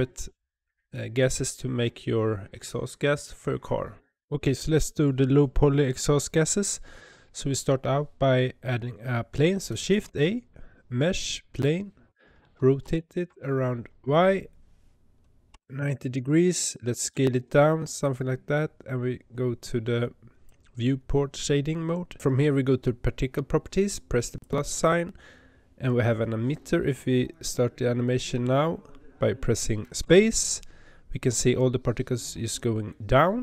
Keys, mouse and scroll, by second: 4.3 click, 11.6 shift+a, 12.8 r, 17.0 s, 20.4-30.0 drag, 30.0 space.